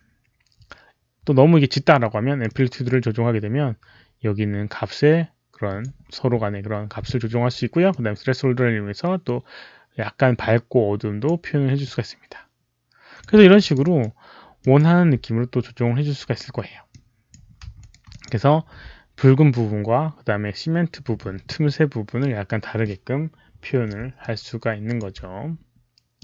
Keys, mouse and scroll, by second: 1.7 alt+click, 1.7 alt+right click, 2.4-5.7 alt+drag, 2.4 alt+right click, 7.8-11.1 drag, 11.7-13.1 drag, 13.5 alt+click, 13.7 alt+right click, 14.5 alt+click, 16.8 click, 17.7 alt+right click, 18.0 alt+click, 24.1-24.9 alt+drag, 26.1 alt+click.